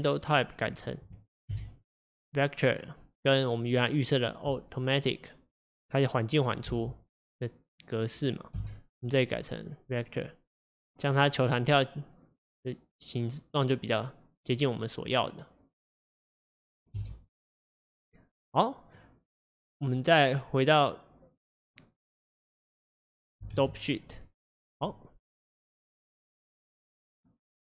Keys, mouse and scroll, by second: 6.8 space, 8.6 v, 17.2 space, 19.1-27.7 drag.